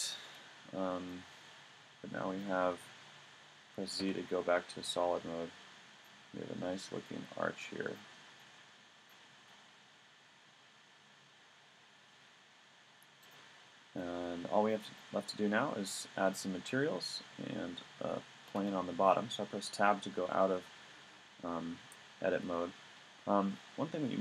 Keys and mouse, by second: 2.4 middle click, 4.0 z, 4.9 click, 5.5 middle click, 6.6 middle click, 11.5 middle click, 13.5 middle click, 15.9-17.6 middle drag, 18.6 Tab.